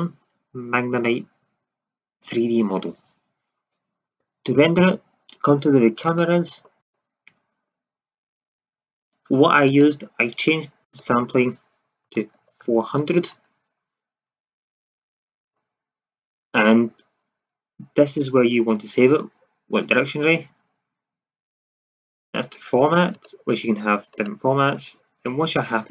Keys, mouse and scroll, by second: 6.0-8.4 drag, 8.4-9.6 middle drag, 9.6-13.4 drag, 12.5 KP_0, 15.7-16.0 middle drag, 23.1 click.